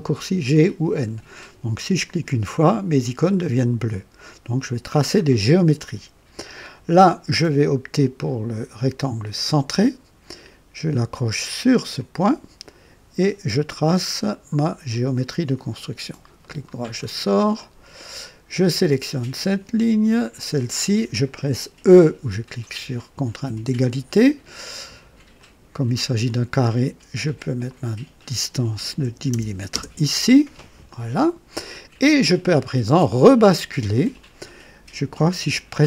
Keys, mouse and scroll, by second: 2.0 click, 8.1 click, 9.4 click, 11.9 click, 14.9 click, 16.4 right click, 17.0-17.4 scroll up 1, 17.6 right click, 19.3 click, 20.3 click, 23.4 e, 25.3 click, 27.6 click, 29.0 KP_1, 29.3 KP_0, 29.7 KP_Enter.